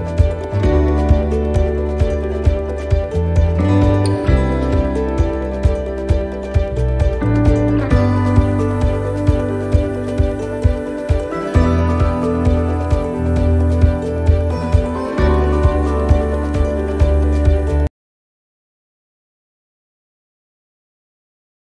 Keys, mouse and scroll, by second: 1.2 click, 1.7 middle click, 3.5 shift+middle click, 4.0 scroll up 1, 4.4 middle click, 4.7 scroll down 1, 6.0 right click, 9.9 right click, 9.9 l, 10.3 middle click, 10.6-11.3 scroll down 1, 13.0 click, 20.2 click.